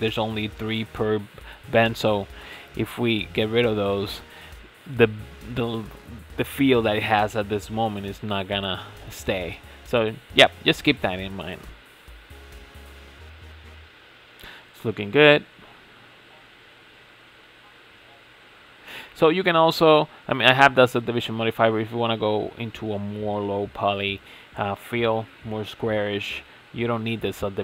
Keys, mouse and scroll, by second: 1.0 shift+click, 2.4 ctrl+z, 2.7 ctrl+z, 6.9 ctrl+x, 7.7 middle drag, 8.0 Tab, 8.2 scroll down 2, 8.4-10.0 middle drag, 10.0 scroll up 4, 10.5-11.3 middle drag, 11.3-12.1 scroll down 5, 12.1 Tab, 12.6-14.7 middle drag, 14.7 Tab, 15.1-17.4 shift+middle drag, 17.4 click, 18.1-19.2 middle drag, 19.2-19.8 scroll down 3, 19.8 click, 20.3-20.9 middle drag, 20.9 scroll up 6, 21.2-25.3 middle drag, 26.4-26.7 shift+middle drag, 26.7-27.1 scroll up 3, 27.1 click.